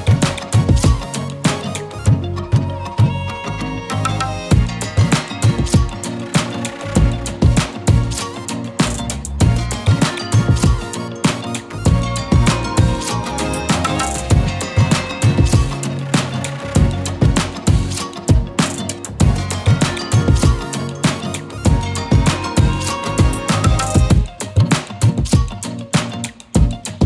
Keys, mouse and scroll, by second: 0.1-0.7 alt+shift+click, 2.1 ctrl+z, 3.0-3.5 scroll down 1, 3.5-8.6 typing, 3.7 click, 4.4 click, 4.9-8.6 click, 9.6 click, 10.4-11.1 scroll up 1, 11.1 click, 12.0 shift+click, 12.5 z, 12.7 click, 13.0 z, 14.4 click, 15.9-16.8 alt+shift+click, 17.5-19.0 typing, 17.9-19.4 click, 18.7 click, 19.1 click.